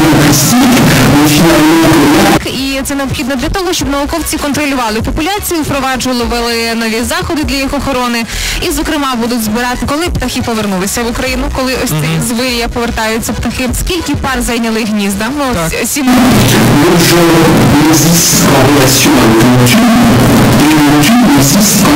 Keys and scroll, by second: 2.4 Page_Down.